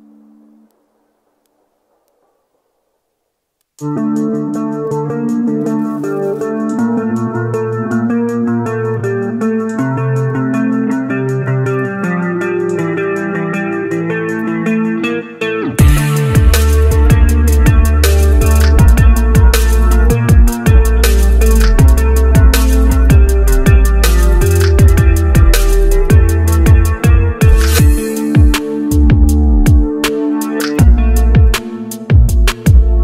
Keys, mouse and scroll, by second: 0.1-0.8 scroll up 1, 2.4-3.4 scroll up 1, 4.1 scroll down 1, 5.6-6.1 scroll down 1, 6.3 ctrl+u, 6.7 ctrl+click, 8.1 scroll up 1, 8.9 scroll, 9.1 shift+click.